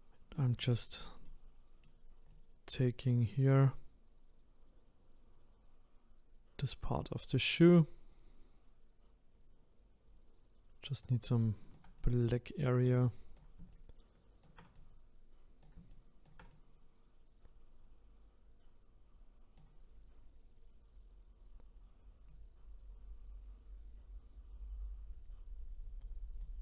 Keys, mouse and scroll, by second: 1.2-2.3 middle drag, 2.3-5.5 right drag, 11.3-22.3 shift+right drag, 22.3-25.3 drag.